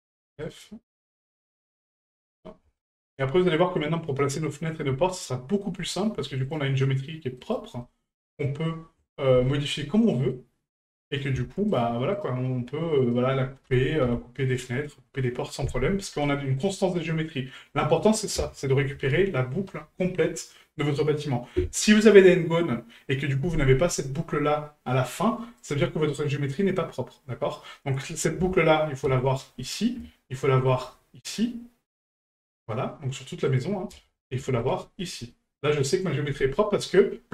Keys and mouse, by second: 0.4 shift+right click, 1.2 shift+right click, 2.8-3.1 shift+middle drag, 3.8 middle click, 4.7 right click, 5.8 middle click, 6.4 shift+right click, 7.4 shift+right click, 7.8 middle click, 10.1 middle click, 11.0 right click, 11.7 shift+right click, 12.1 shift+right click, 13.0 shift+right click, 16.1 middle click, 16.7-17.3 middle drag, 17.8 middle click.